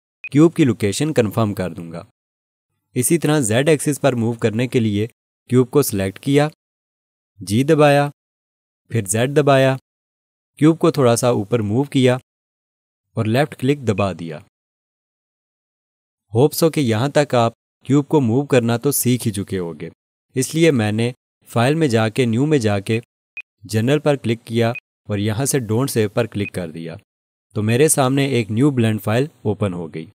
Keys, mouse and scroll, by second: 0.2 click, 7.8 g, 9.4 z, 14.0 click, 22.9 click, 23.3 double click, 24.7 click.